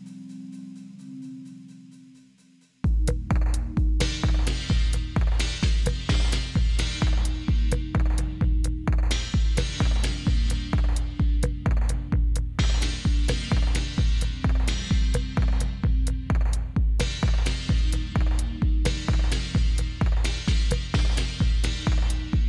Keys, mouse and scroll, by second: 0.1 shift+7, 1.5 Up, 2.5 Down, 2.8 Down, 3.7 Up, 4.3 Up, 5.9 Down, 6.1-7.5 typing, 8.0 Delete, 8.6 Down, 8.8 Down, 9.0 typing, 10.6 typing, 11.8-14.8 typing, 15.9-20.3 typing.